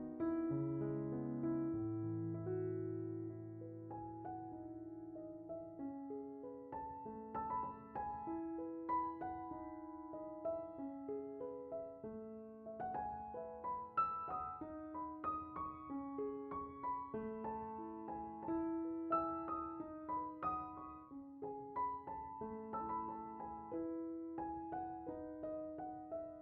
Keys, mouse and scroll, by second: 1.4 click, 3.2-4.2 drag, 5.5-8.7 drag, 10.3 middle click, 12.6 click, 15.7-16.8 drag, 18.2 middle click, 18.8 click, 25.5 scroll, 26.1-26.4 right drag.